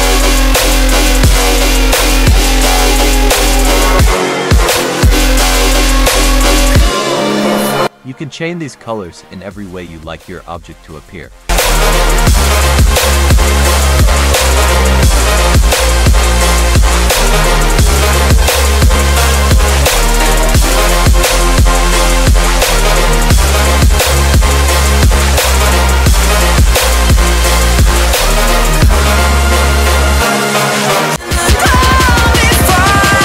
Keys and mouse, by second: 2.1 middle click, 6.5 click, 6.8 click, 9.5 click, 10.4 click, 10.8-14.1 drag, 14.7 click, 16.2-17.5 drag, 17.8-18.2 drag, 18.3 click, 18.8 click, 23.0 middle drag, 25.9-28.3 drag.